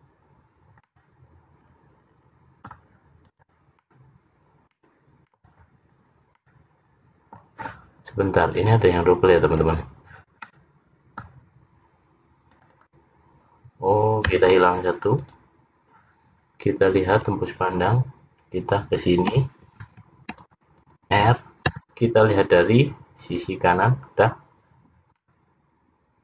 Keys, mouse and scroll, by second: 0.9 middle click, 3.3 click, 3.9 middle click, 6.0 scroll down 1, 6.4 middle click, 8.6 click, 9.6 click, 10.5 middle click, 12.6 click, 13.1 click, 14.4 x, 17.2 click, 19.9 ctrl+r, 24.6 scroll down 1, 25.3 middle click.